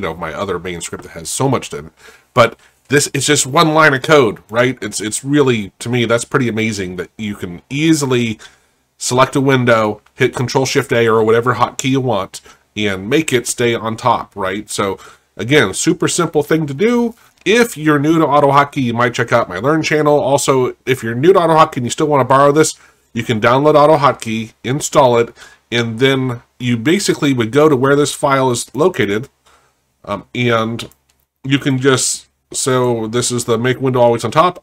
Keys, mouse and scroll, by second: 3.2 click, 4.5 click, 27.7 right click, 28.7 click, 34.1 right click.